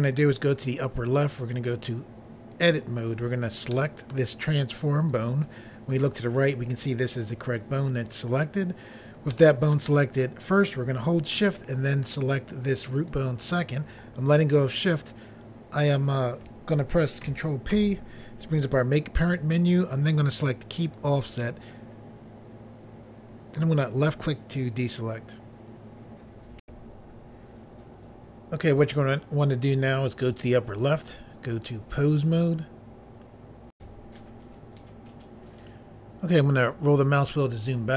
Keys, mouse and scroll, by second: 33.7 Pause, 36.9-37.2 scroll down 1.